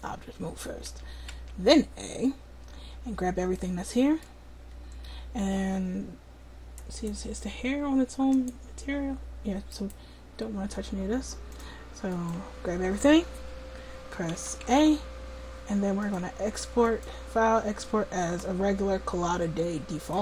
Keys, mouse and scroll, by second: 0.0-1.4 drag, 0.9 a, 1.4 a, 6.9-8.4 right drag, 9.0 click, 10.7 right click, 12.4-14.4 drag, 14.4 a, 14.7 a, 16.0-17.8 drag.